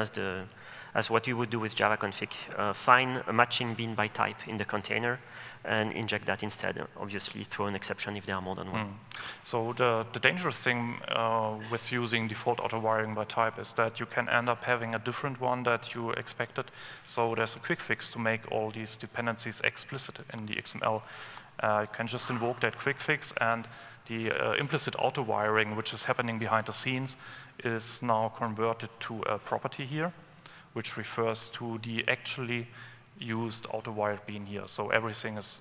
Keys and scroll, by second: 20.6 alt+Return.